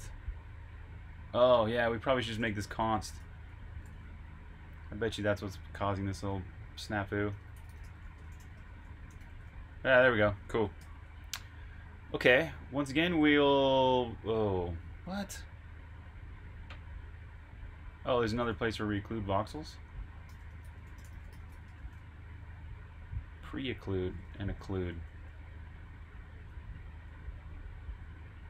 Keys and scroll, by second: 0.0-0.3 typing, 1.7-3.6 typing, 5.3-6.6 typing, 10.5-11.9 typing, 20.0-21.9 typing, 24.2 Escape, 24.4-25.1 typing, 26.4-27.2 typing.